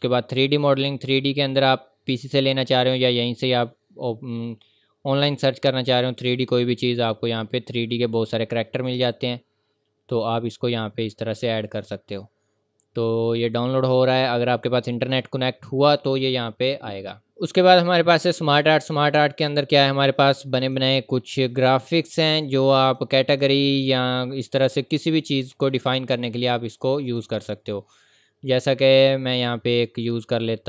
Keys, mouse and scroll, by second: 2.7 click, 4.9-6.2 scroll down 1, 6.2 click, 9.0 click, 17.3 click, 18.6 click, 24.9-25.6 scroll down 1, 25.6-26.7 scroll up 1, 26.7 click, 29.0-29.8 scroll down 1, 29.8-30.2 scroll up 1, 30.4 scroll down 1.